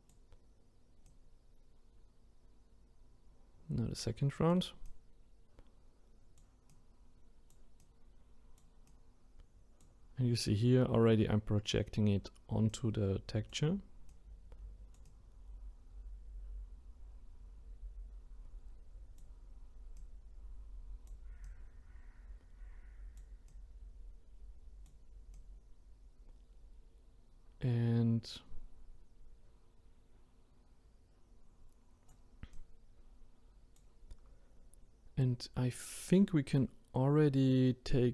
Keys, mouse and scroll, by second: 4.8-38.1 drag.